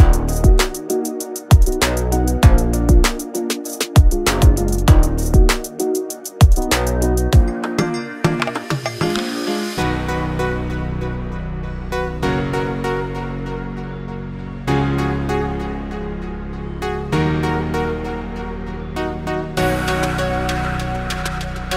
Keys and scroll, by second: 0.0-0.4 typing, 2.0 m, 4.4 space, 5.2 Delete, 6.4 p, 7.5 space, 7.7 Escape.